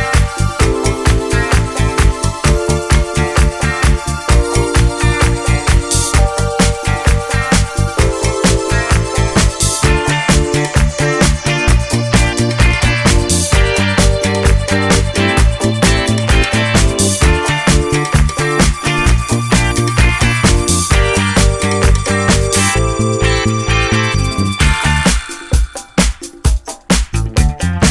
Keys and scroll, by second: 25.7 9, 25.9 Return, 26.2 Escape, 26.3 d, 26.9 ., 27.0 Return, 27.3 ., 27.5 Return.